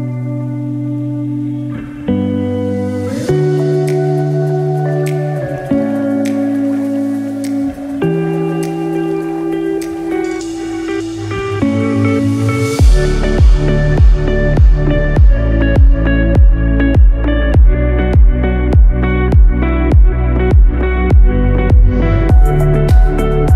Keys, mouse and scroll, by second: 2.4 6, 15.1 middle click, 15.7 KP_1, 16.3-16.9 scroll up 3.